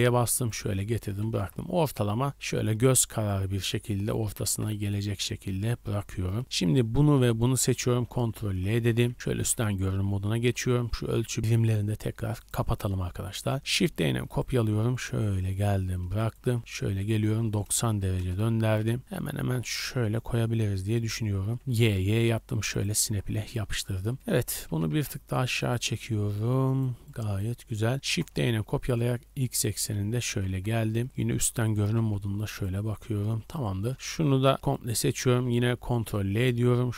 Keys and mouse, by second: 1.0 g, 4.2 g, 7.4 shift+click, 8.4 ctrl+l, 9.0 KP_7, 9.3 z, 11.4-13.2 drag, 13.6 shift+d, 13.8 click, 14.4-15.5 middle drag, 15.5-20.2 shift+drag, 16.6 r, 18.8 g, 20.6 g, 21.5 g, 24.1 z, 24.6 g, 25.8 shift+middle click, 26.4 click, 27.9 shift+d, 29.9 KP_7, 30.5 KP_Decimal, 30.9 z, 31.7 g, 32.8 click, 33.6 shift+middle click, 34.5 b, 36.0 ctrl+l, 36.7 b.